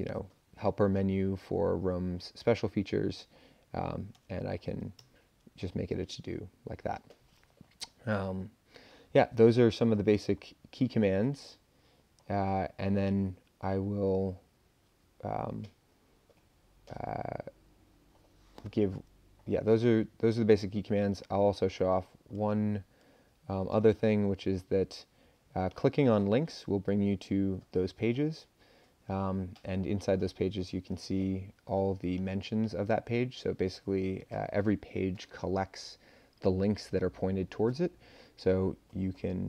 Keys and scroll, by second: 2.7 Return, 4.1 BackSpace, 5.0 Page_Up.